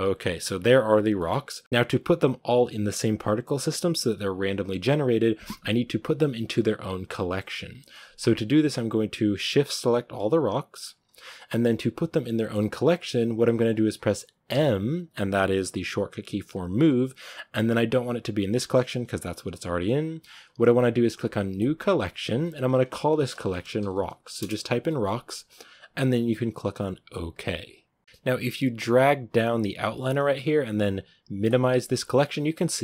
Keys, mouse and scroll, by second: 9.4 right click, 10.0-24.3 shift+right drag, 28.0-32.8 drag.